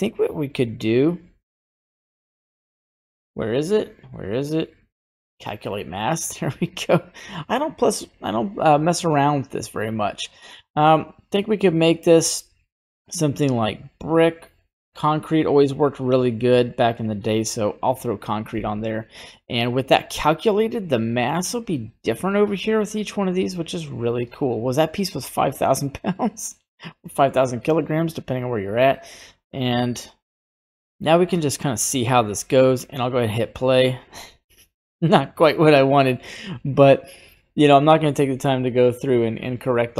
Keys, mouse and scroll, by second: 20.5 right click, 23.1 right click, 23.8 right click, 25.2 right click, 25.6 right click, 26.1 right click, 32.4 click, 36.1 click, 36.8 middle click.